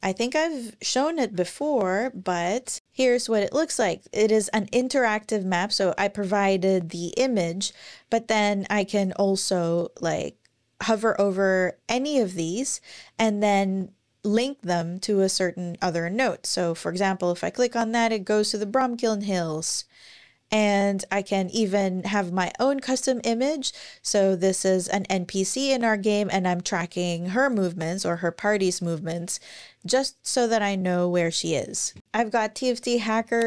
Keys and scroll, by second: 0.9 ctrl+super+r, 1.3 super+o, 1.9 super+o, 2.4 super+Return, 19.3 super+w.